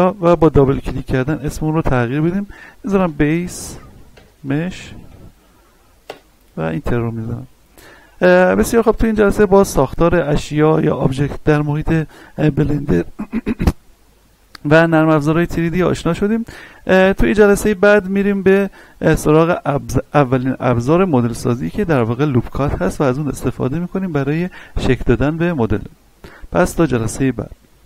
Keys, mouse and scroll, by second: 2.9-5.1 typing, 6.0 Return, 7.2 middle click, 7.8-8.3 scroll down 1, 8.3-12.5 middle drag, 17.1-18.9 scroll up 1, 27.7 ctrl+Num_Lock, 27.7 scroll up 1.